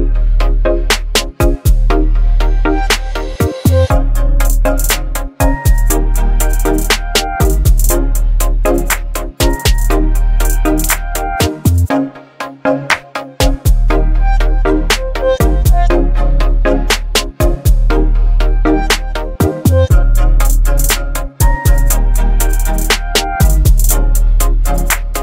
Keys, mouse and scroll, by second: 24.2 alt+scroll up 1.